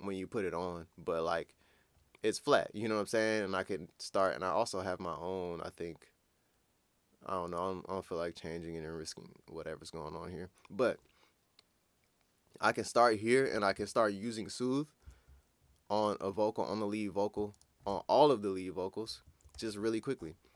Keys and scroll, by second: 19.5 ctrl+super+w.